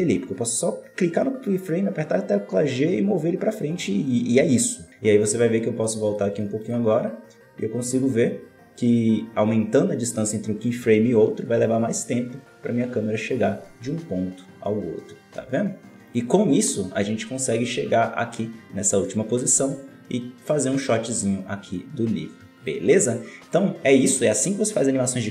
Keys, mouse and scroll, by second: 5.8-9.6 drag, 16.0-17.5 drag, 17.5 scroll down 4, 19.9-20.4 scroll up 4, 22.5-25.3 drag.